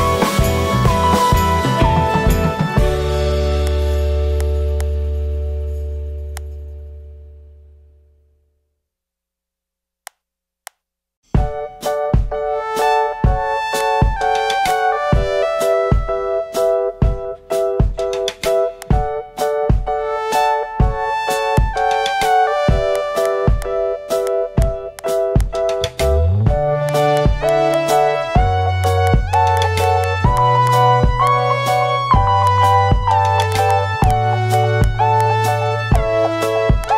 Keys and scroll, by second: 35.6 alt+super+z, 36.2 alt+super+z.